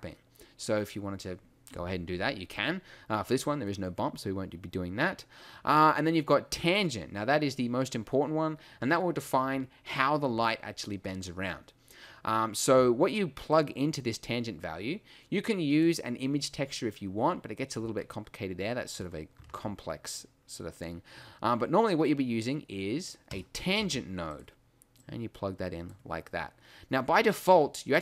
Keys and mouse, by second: 4.1-11.8 drag, 13.5-15.8 drag, 19.4 shift+a, 23.9 g.